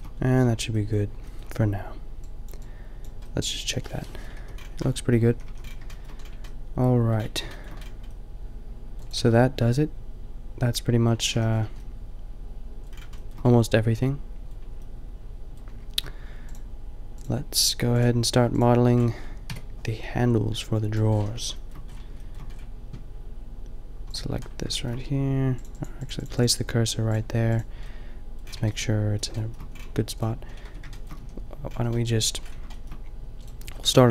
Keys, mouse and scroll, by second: 4.3 KP_5, 5.2 a, 5.6 a, 9.2 a, 11.3 a, 11.5-14.1 middle drag, 19.4 KP_5, 27.9 middle click, 28.3-30.1 middle drag, 30.2-30.6 middle drag, 30.7 Tab, 31.2 a, 31.7 a.